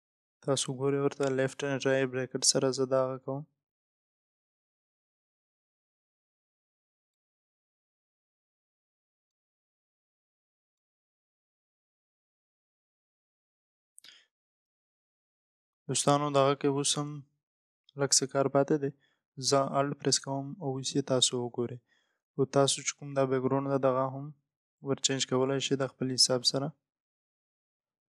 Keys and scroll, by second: 15.2 ctrl+0.